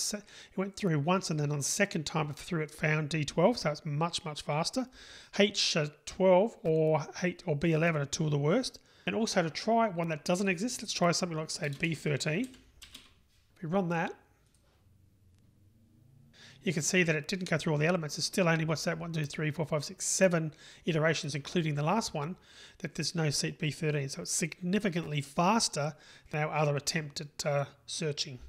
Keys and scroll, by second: 12.8 Delete, 14.8 super+r.